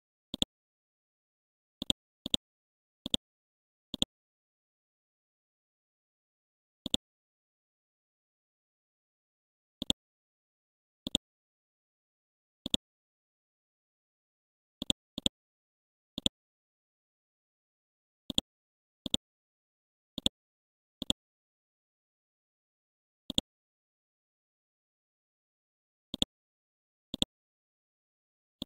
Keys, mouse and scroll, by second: 4.9 KP_3, 6.8 click, 7.7 KP_4, 7.9 KP_0, 9.8-21.0 drag, 21.3-21.8 typing, 22.3 Return, 23.3-25.3 drag, 26.1 shift+click, 26.6 shift+c, 27.1 shift+click, 27.5 shift+c.